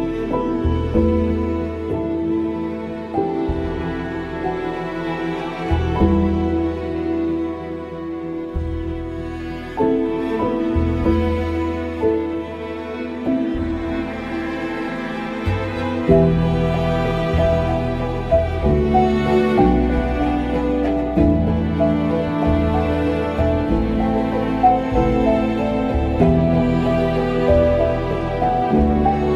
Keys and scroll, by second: 1.6 ctrl+g.